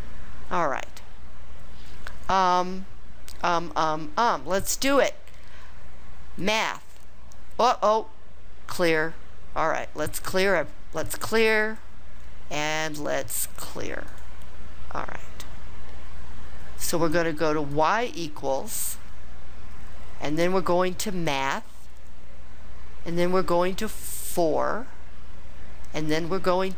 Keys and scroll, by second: 24.3 4.